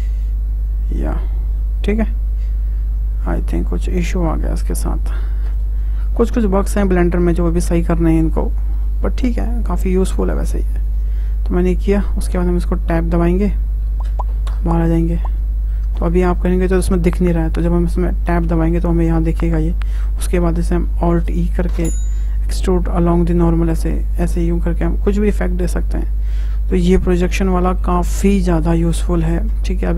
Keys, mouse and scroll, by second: 0.2 click, 0.9-1.4 scroll up 2, 1.5 scroll down 1, 1.6-4.6 middle drag, 6.4-8.4 shift+middle drag, 8.4 Escape, 8.8 `, 10.8 click, 12.3 `, 14.1 Tab, 14.4-14.8 middle drag, 14.8 click, 15.3-17.5 middle drag, 17.5 click, 18.7-21.1 middle drag, 21.1 alt+e, 24.4-27.4 middle drag.